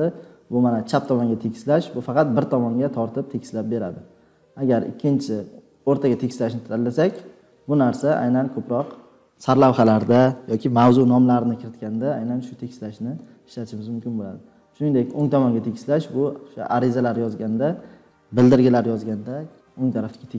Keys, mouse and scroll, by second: 7.5 click.